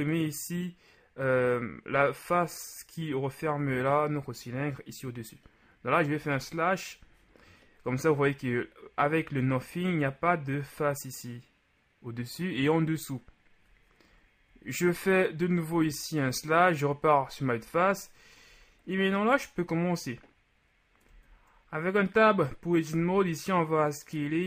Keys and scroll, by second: 4.3 KP_Multiply, 6.1 KP_Divide, 14.5 KP_Divide, 15.7 KP_1, 21.1 Tab, 22.9 s.